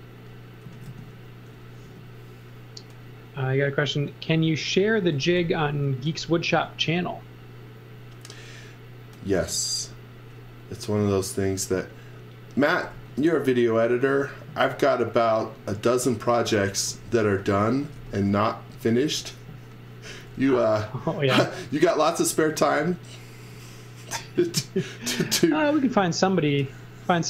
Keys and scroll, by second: 0.2-1.8 typing, 4.7-6.8 typing, 7.9 m, 9.8 m, 10.8 m, 12.5-13.6 typing, 16.3-19.0 typing, 20.0 x, 20.3 v, 21.4-24.1 typing, 26.1-27.2 typing.